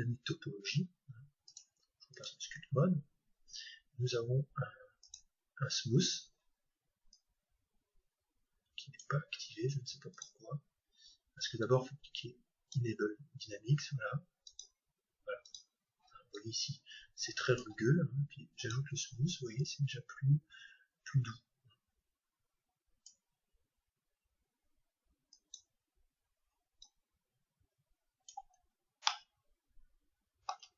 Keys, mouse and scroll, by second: 1.4-4.0 drag, 4.0-6.9 middle drag, 5.0-7.0 drag, 7.2-9.1 drag, 10.1-13.5 drag, 14.6-18.3 drag, 18.6-23.3 drag, 25.3-28.7 drag, 29.0-30.7 middle drag.